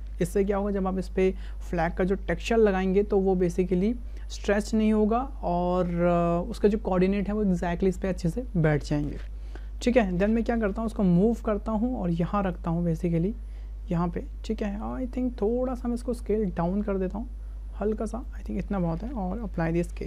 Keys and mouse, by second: 9.9 shift+middle click, 10.7 w, 11.2 click, 12.5-13.9 drag, 14.6 shift+click, 16.5 s, 19.0 ctrl+a.